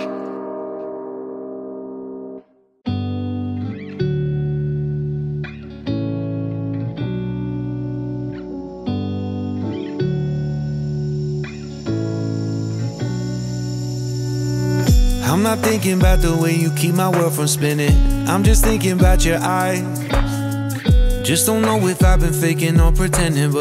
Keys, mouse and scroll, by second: 0.4 z, 5.9-6.4 scroll down 3, 6.4-9.5 drag, 10.3-13.3 drag, 14.2 scroll up 2, 14.8-19.9 shift+middle drag, 19.9-23.2 drag.